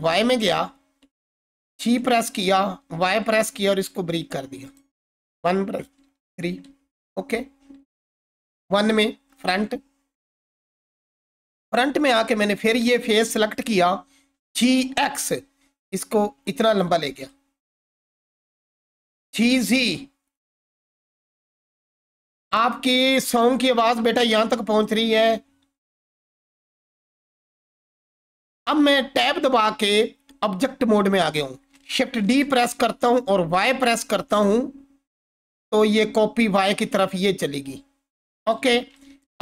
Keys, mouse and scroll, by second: 1.7 g, 2.8 y, 4.6 click, 5.1-6.5 typing, 8.5 1, 10.9-11.5 alt+click, 12.8-14.3 scroll down 1, 14.1-15.3 typing, 16.7 click, 17.6-17.9 alt+click, 18.8-19.9 typing, 20.7 click, 22.5-23.4 scroll down 1, 23.8-25.1 alt+drag, 25.9 Tab, 31.8 shift+Tab, 32.2 shift+d, 33.3 y, 38.4 click, 38.9-39.4 alt+drag.